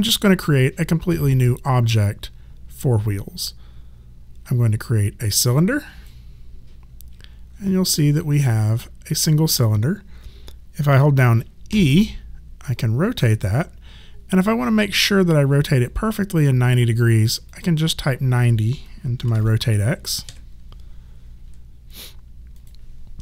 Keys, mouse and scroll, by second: 5.6 click, 11.7 e, 12.7 click, 17.5 click, 19.3 KP_9, 19.4 KP_0, 20.3 KP_Enter, 21.9 click.